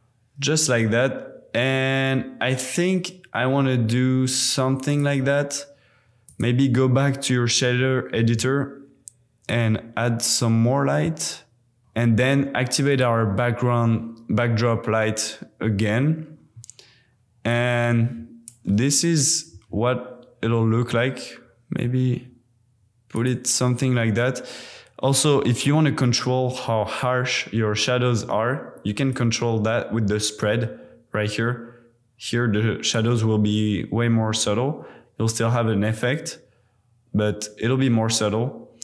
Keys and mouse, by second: 4.9 click, 6.2-7.6 drag, 9.4 click, 11.8-12.9 middle drag, 17.5-17.9 middle drag, 19.5 g, 23.1 click, 29.1-30.8 drag, 33.1-34.9 middle drag, 34.2 r, 34.5 r.